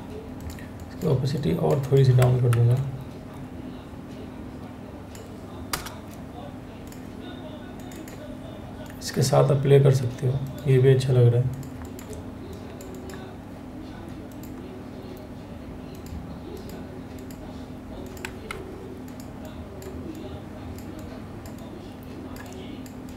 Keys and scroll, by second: 2.1 ctrl+t, 5.3 Return, 8.1 Return.